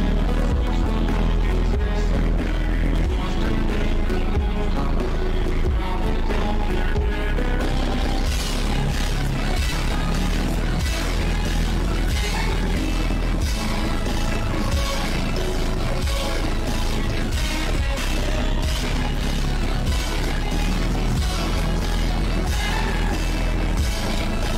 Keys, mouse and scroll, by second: 0.7 click, 1.6 click, 2.0 click, 2.2 shift+`, 3.7 click, 4.0 shift+`, 5.7 click, 7.1 shift+`, 7.8 shift+`, 8.5 click, 9.0 click, 9.8 shift+`, 12.0 click, 12.6 click, 13.4 shift+`, 15.3 click, 15.7 click, 16.4 shift+`, 16.8 click, 17.1 click, 18.2 click, 18.5 click, 18.9 click, 19.2 click, 19.8 ctrl+z, 19.8 click, 20.1 click, 20.5 shift+`, 22.8 shift+`.